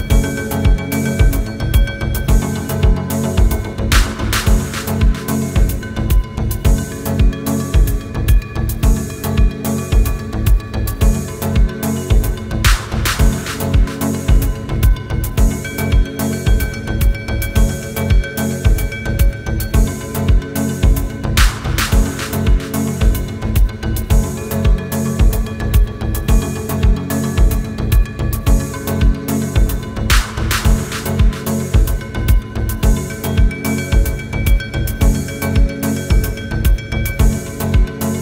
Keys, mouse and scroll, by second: 0.3 click, 2.3 Up, 2.7 click, 8.7 click, 10.5 right click, 11.5 click, 14.0 ctrl+j, 15.1 click, 15.9 ctrl+space, 15.9-16.9 ctrl+click, 16.7-17.4 space, 17.4 ctrl+space, 17.6 ctrl+click, 17.8-18.4 ctrl+space, 19.5 click, 20.5 ctrl+z, 20.7 click, 24.0 Up, 24.2 click, 25.9 Up, 26.1 click, 28.9 click, 32.0 ctrl+j, 32.2 space, 32.4-33.0 click, 32.7-33.5 space, 35.5-36.4 typing, 35.6-36.5 ctrl+click, 36.9 ctrl+click, 37.1 ctrl+space, 37.7-38.2 click.